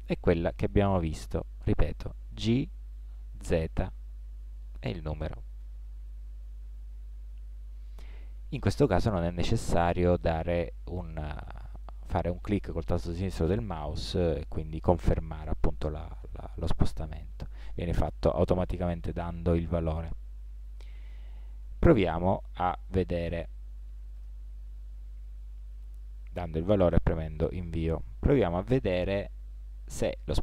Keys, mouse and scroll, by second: 1.0 ctrl+z, 2.4 g, 28.6 ctrl+z, 29.5-30.4 middle drag.